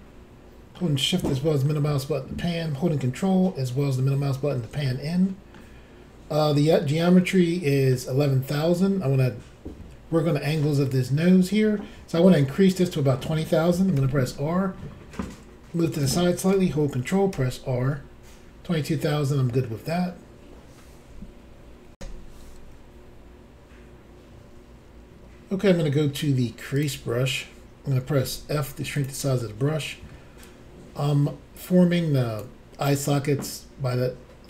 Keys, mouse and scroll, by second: 0.0 shift+middle click, 1.7 ctrl+middle click, 4.9 shift+middle click, 5.6-6.4 scroll up 1, 6.4 scroll down 2, 7.4 middle click, 14.0 r, 16.0 click, 17.3 ctrl+r, 22.0 Insert, 26.7 click, 26.8 click, 28.2 f, 28.9 click, 29.0 click, 29.4 middle click, 30.4 ctrl+click.